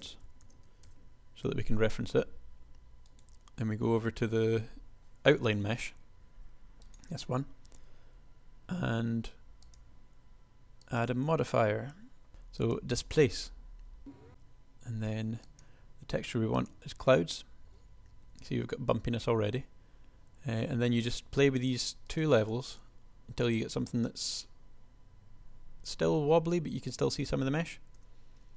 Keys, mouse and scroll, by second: 5.8 g, 9.1 s, 28.0 p.